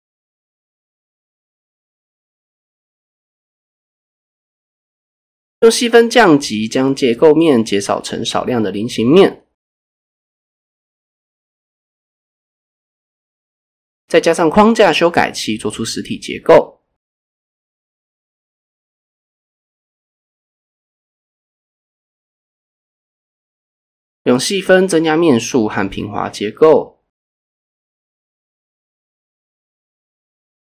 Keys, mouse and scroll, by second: 0.0 click, 1.3 click, 2.1 click, 2.9 click, 3.1 click, 4.0 click, 4.7 click, 5.5 click, 6.3 click, 6.7 click, 7.5 click, 10.8 click, 12.4-14.4 drag, 16.2 click, 17.1 click, 18.6 click, 19.0 click, 19.4 click, 20.1 click, 22.2-24.5 drag, 25.1 click, 26.1-26.6 scroll up 3, 27.9 click, 28.6 scroll down 2, 30.1 click, 30.5 Tab.